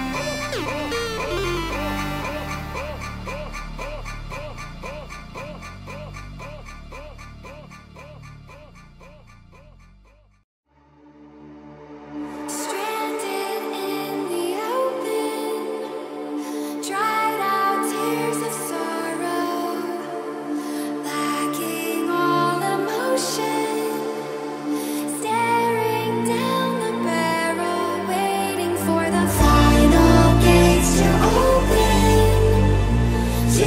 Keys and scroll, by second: 23.7 Caps_Lock, 24.0-28.5 typing, 24.1 Caps_Lock, 29.7-31.8 typing.